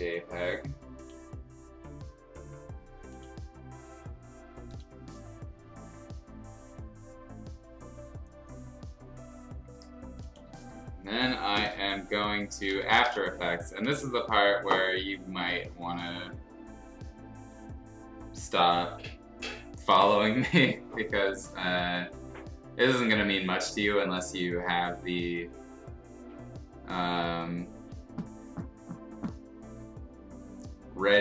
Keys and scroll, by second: 12.2-13.6 typing.